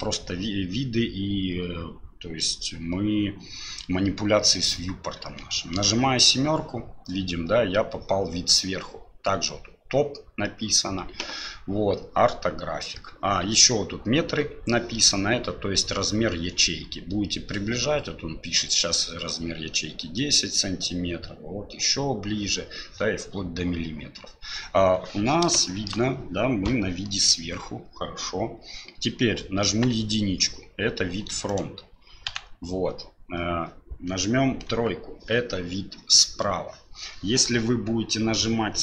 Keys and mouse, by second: 5.9 KP_7, 25.6 shift+click, 29.7 KP_1, 31.5 click, 32.3 KP_Decimal, 34.7 KP_3.